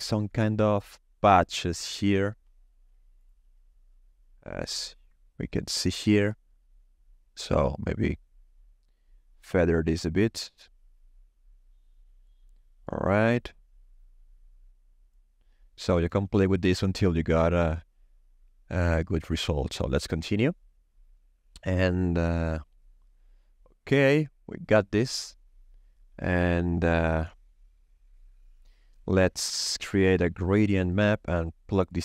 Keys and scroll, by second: 29.8 shift+a, 30.4 g, 30.4 r.